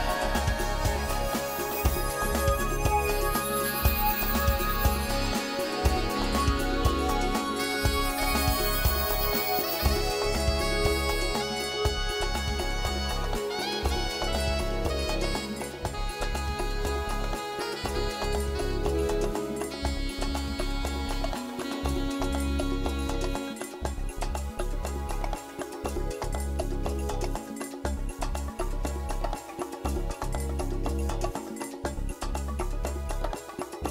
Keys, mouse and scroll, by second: 0.4 shift+click, 0.9 click, 1.6 ctrl+z, 2.3 click, 2.8 shift+click, 3.1 click, 3.8 click, 4.1 middle click, 4.9 g, 6.8 click, 7.0 middle click, 10.4 Tab, 10.6 middle click, 12.8 scroll down 3, 12.9 shift+middle click, 13.4 middle click, 14.1 shift+middle click, 14.4 middle click, 15.1 Tab, 16.2 KP_1, 16.9 a, 17.2 b, 18.6 click, 19.1 a, 19.2 b, 20.1 g, 21.3 click, 21.4-21.8 scroll down 4, 22.2 g, 23.3 click, 23.6 middle click, 25.9 shift+middle click, 27.6 a, 28.1 Tab, 28.4 shift+middle click, 28.7 middle click, 30.3 scroll up 5, 30.7 shift+middle click, 31.1 middle click, 33.8 Tab.